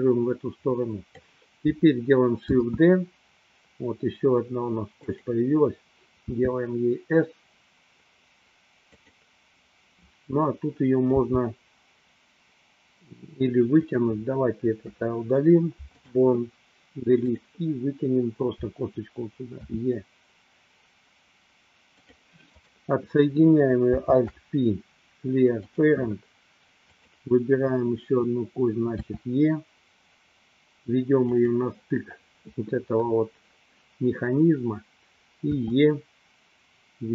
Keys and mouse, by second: 2.6 shift+d, 6.4 s, 9.2 click, 11.3 g, 15.1 Delete, 17.3 click, 19.6 e, 22.1 click, 22.7 click, 24.1 alt+p, 26.9 click, 29.1 e, 31.5 click, 35.6 e.